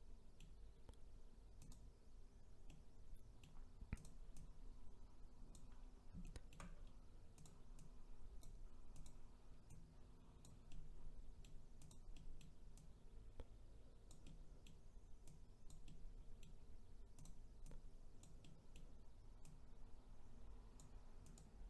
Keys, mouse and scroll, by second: 1.7 click, 2.7-4.0 middle drag, 4.0 click, 4.4 click, 5.8-6.2 scroll down 1, 6.2 shift+middle click, 6.8-7.5 scroll up 1, 7.5 click, 7.8 click, 9.7 click, 10.7-11.9 middle drag, 11.9 click, 12.2 middle click, 12.8 click, 14.2-15.3 middle drag, 15.3 click, 15.9-17.2 middle drag, 17.2 click, 17.7 click, 18.4-19.5 middle drag, 19.5 click, 21.3 click.